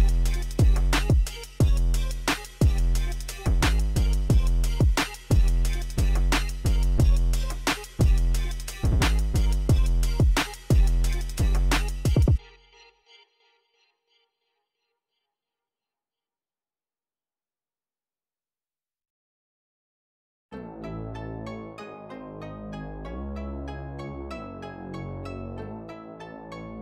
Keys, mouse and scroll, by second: 0.4 click, 1.1 KP_0, 1.4 KP_5, 1.6 Return, 2.4 click, 3.1 KP_1, 3.2 KP_0, 3.5 Return, 4.6 click, 15.3 click, 16.1 click, 17.0 KP_0, 17.3 KP_8, 17.5 Return, 23.3 click, 24.0 KP_0, 24.2 KP_9, 24.5 Return.